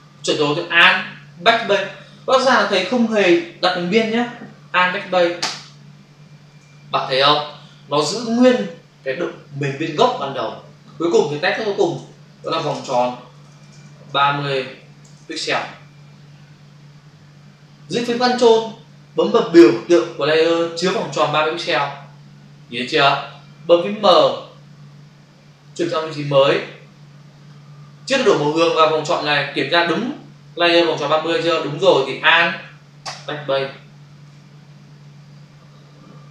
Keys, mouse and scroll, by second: 5.4 alt+BackSpace, 6.5 ctrl+d, 11.8 ctrl+shift+n, 12.1-13.7 typing, 14.8 0, 15.0 space, 15.5 Return, 21.6 ctrl+click, 24.1 m, 25.7 click, 33.0 alt+BackSpace, 34.2 ctrl+d.